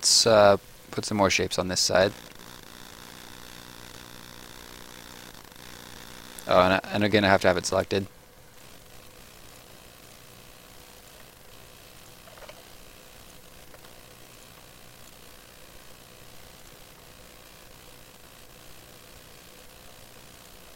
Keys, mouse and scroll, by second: 1.9 click, 3.3 shift+click, 4.5 ctrl+shift+click, 5.9 click, 6.6 Escape, 7.6 click, 9.7 shift+click, 10.7 ctrl+shift+click, 12.0 click, 12.1 shift+click, 12.3 ctrl+shift+click, 14.3 click, 14.5 shift+click, 15.8 ctrl+shift+click, 19.4 click, 19.8 shift+click, 20.6 ctrl+shift+click.